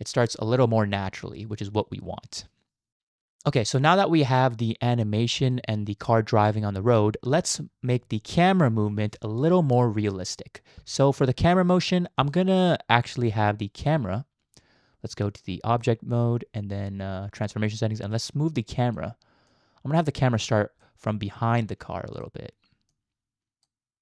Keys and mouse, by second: 2.9 KP_0, 2.9 space, 5.3 space, 5.5-6.5 drag, 12.3 click, 15.8 click, 18.2 click, 19.5 click, 20.8 click, 21.7 middle click, 21.9 click, 23.0 click.